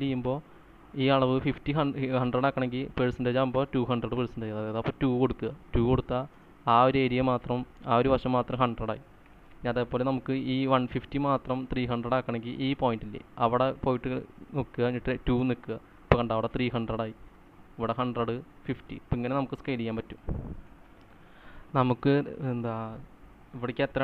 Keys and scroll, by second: 6.5 2, 6.7 Return, 9.7 ctrl+z, 15.5 2, 15.7 Return, 18.9-21.3 typing, 21.2 ctrl+z.